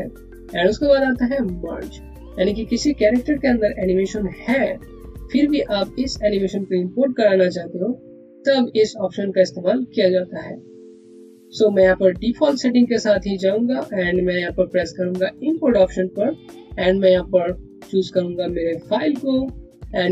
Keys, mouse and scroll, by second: 15.3 click, 18.7 click.